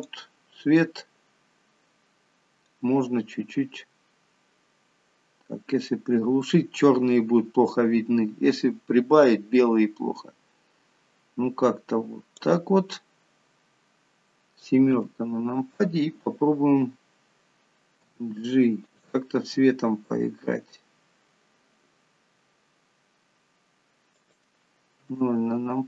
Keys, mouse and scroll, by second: 0.5 click, 15.1 KP_7, 18.3 g, 19.8 r, 25.3 KP_0.